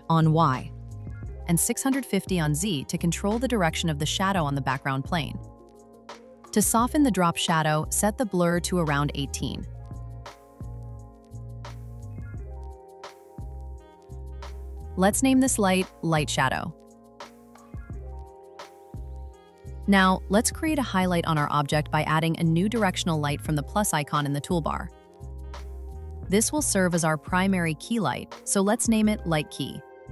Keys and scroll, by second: 10.9 Return, 16.9 Return, 19.6 Return, 29.9 Return.